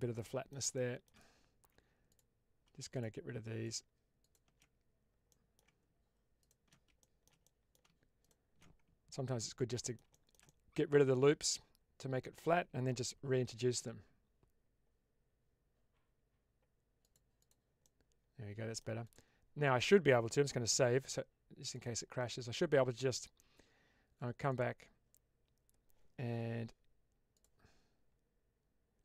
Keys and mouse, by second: 0.6 shift+middle click, 2.1 alt+click, 2.8 alt+shift+click, 3.6 alt+shift+click, 4.1 alt+shift+click, 5.2 middle click, 6.3 alt+shift+click, 7.0 shift+middle click, 7.3 middle click, 9.2 ctrl+x, 9.6 middle click, 10.1-12.4 shift+middle drag, 13.2 ctrl+b, 17.3 click, 17.7-18.7 middle drag, 19.0 click, 20.6 ctrl+s.